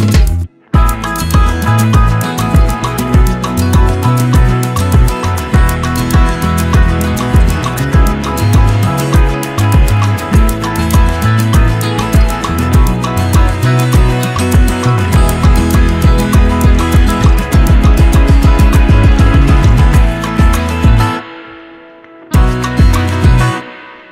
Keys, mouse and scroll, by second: 2.9 right click, 4.5 click, 7.3 ctrl+d, 8.3-19.7 drag, 20.1 right click, 21.6 click.